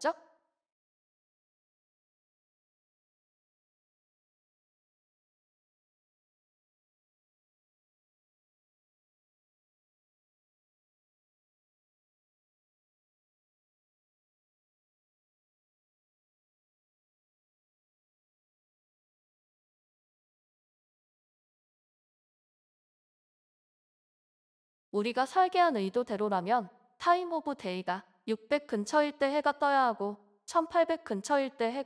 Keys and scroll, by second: 21.9-23.6 typing, 25.1-26.4 typing, 29.8-31.8 typing.